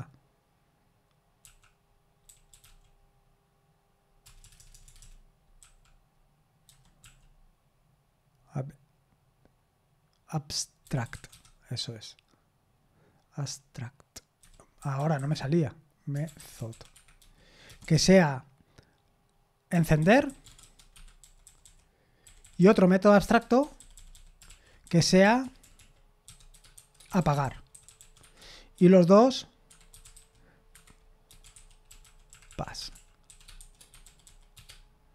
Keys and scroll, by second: 25.2-30.6 typing, 33.7-35.0 typing.